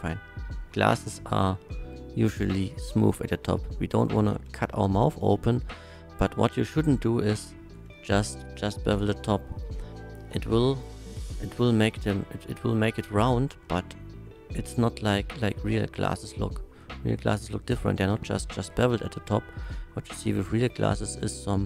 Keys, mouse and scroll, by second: 0.5 middle click, 1.3 alt+shift+click, 3.5 alt+shift+middle click, 4.2 shift+middle click, 5.2 shift+middle click, 7.2 shift+middle click, 8.0 shift+middle click, 8.8 ctrl+b, 11.2 c, 12.3 right click, 13.3 middle click, 14.0 ctrl+b, 18.8 shift+right click, 20.1 middle click.